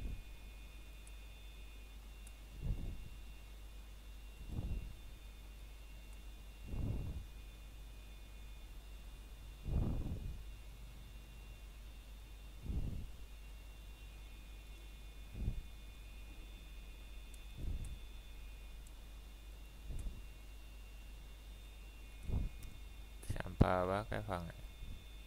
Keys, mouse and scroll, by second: 1.3 scroll up 1, 1.9 middle click, 2.4 scroll up 1, 2.7 shift+middle click, 3.1 scroll up 1, 3.9 middle click, 4.4-4.9 scroll down 1, 4.9 middle click, 5.4 shift+middle click, 5.7-6.8 scroll up 1, 7.0 middle click, 7.8-8.2 scroll down 1, 8.4 middle click, 10.0-10.8 scroll up 1, 10.8 middle click, 12.3 s, 17.0 click, 17.9 scroll up 1, 18.7 middle click, 19.9 scroll up 1, 20.5 alt+click, 21.3 middle click, 22.2 shift+click, 22.6 middle click, 23.8-24.1 scroll down 1, 24.1 middle click, 24.5 scroll up 1.